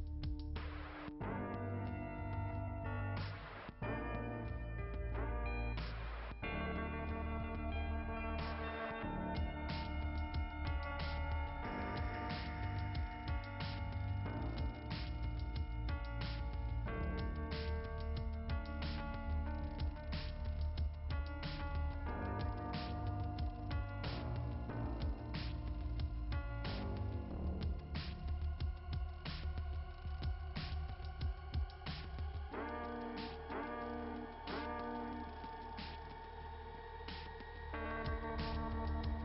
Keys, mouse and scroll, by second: 2.4 click, 4.5-5.5 typing, 6.9 click, 9.7-10.9 scroll down 1, 11.0 click, 11.9 click, 12.3 click, 12.3 double click, 13.0 double click, 19.1 click, 21.6 click, 23.8 click, 27.9 click, 29.7-30.7 typing, 31.9-33.6 typing, 34.5 click, 38.8 click.